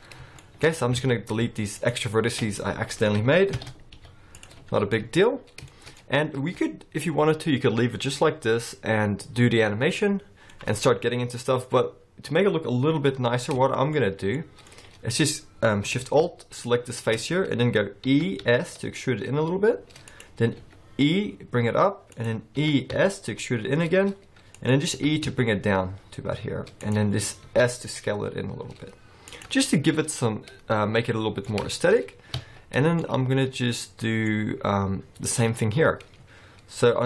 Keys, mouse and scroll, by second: 0.1 scroll down 2, 0.3 shift+middle click, 0.6-0.9 scroll up 4, 0.9 alt+a, 1.7 alt+shift+click, 3.5 ctrl+l, 3.9 x, 4.7-5.3 scroll down 4, 4.9 middle click, 5.3-5.7 scroll up 5, 5.7 shift+middle click, 9.9 middle click, 13.7 shift+middle click, 14.0-14.3 scroll up 3, 14.3 middle click, 14.7-16.0 scroll up 1, 16.5 alt+shift+click, 18.0 e, 20.6 e, 22.6 e, 24.9 e, 27.4 s, 29.6-30.1 scroll down 3, 30.1 middle click, 31.7 shift+middle click, 32.0-32.4 scroll up 3, 32.4 alt+a, 33.0 middle click.